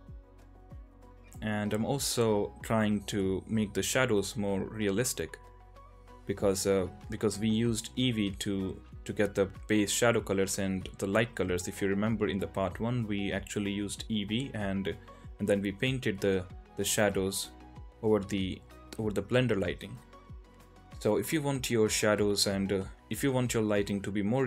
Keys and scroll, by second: 0.0-1.2 typing, 2.9-5.5 typing, 3.0 alt+b, 4.2 ctrl+z, 4.6 ctrl+z, 5.2 ctrl+z, 6.6 ctrl+z, 6.6 Tab, 7.4 Tab, 7.4-8.1 typing, 8.5 ctrl+z, 10.1-12.5 typing, 11.8 ctrl+z, 12.5 ctrl+z, 13.9 Tab, 15.2 Tab, 15.6 [, 15.7 [, 16.2 alt+q, 19.7 q, 23.6 ctrl+z, 23.7 ], 23.8 ].